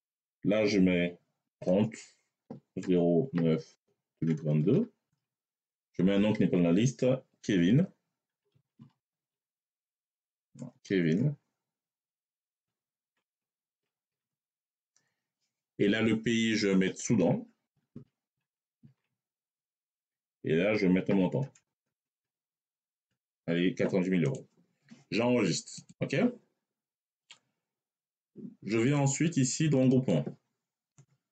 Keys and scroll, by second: 1.3-4.4 typing, 4.9 Tab, 8.2 k, 8.3 z, 8.6 v, 9.1 i, 10.6 BackSpace, 12.4 e, 13.1 v, 13.6 i, 13.9 n, 14.1 Tab, 17.5-18.7 typing, 19.4 Tab, 20.9 9, 21.6 0.